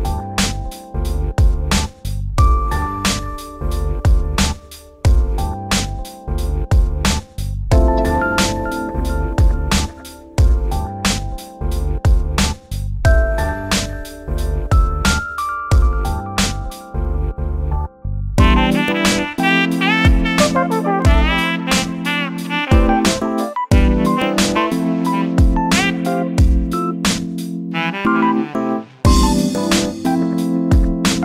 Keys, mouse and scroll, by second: 2.9-10.5 drag, 11.1-14.5 middle drag, 14.5-15.5 drag, 16.5 click, 17.1-18.9 drag, 20.8-21.4 drag, 21.9 click, 22.3-23.3 middle drag, 23.3-23.6 scroll up 2, 23.7-25.3 middle drag, 25.3 z, 25.7-26.8 middle drag, 26.8 Tab, 27.2 2, 27.7 alt+click, 28.1 middle click, 28.2 scroll down 3, 28.5 middle click, 28.9 KP_7, 29.5-30.3 shift+middle drag, 30.3-31.2 drag.